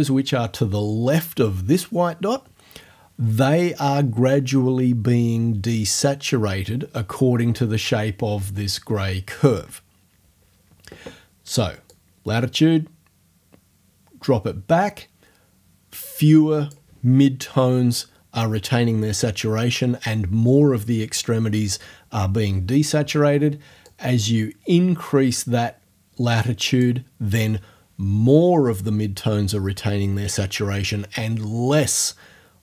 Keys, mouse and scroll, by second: 11.9-16.9 drag, 24.0-27.0 drag.